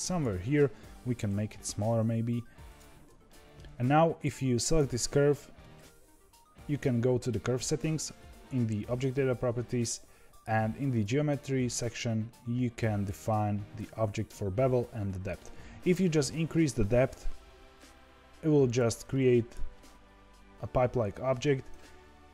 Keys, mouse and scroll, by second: 1.2 s, 3.2-4.6 shift+middle drag, 4.6 click, 7.5 click, 10.8-13.8 drag, 15.9-19.0 shift+drag, 19.0-22.3 middle drag.